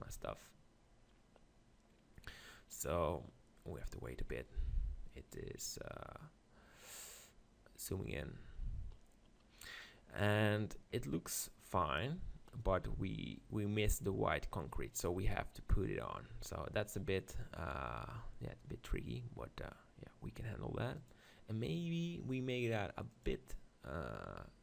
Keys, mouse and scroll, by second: 0.0 click, 7.9 middle click, 23.6-24.6 drag.